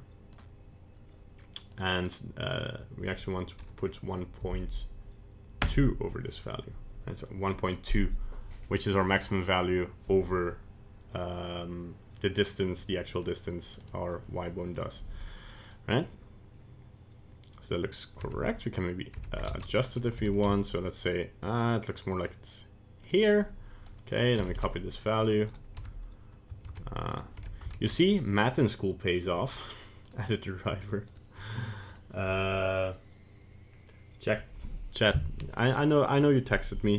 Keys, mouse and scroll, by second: 13.7 right click, 14.8 right click, 15.7 right click, 18.3 Tab, 19.3 Tab, 19.9 right click, 20.2 g, 24.1 click, 25.5 right click, 25.9 Tab, 26.7 ctrl+Tab, 27.5 Tab, 28.1 right click, 29.2 right click, 31.1 right click.